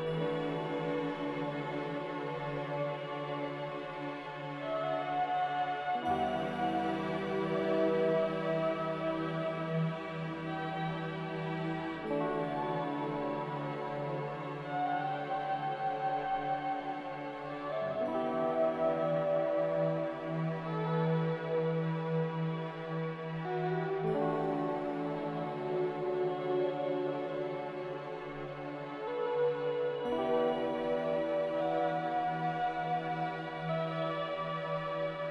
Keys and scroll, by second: 10.8-11.7 typing, 11.9 Return, 20.6-21.5 typing, 24.7-25.6 typing, 29.4-31.6 typing.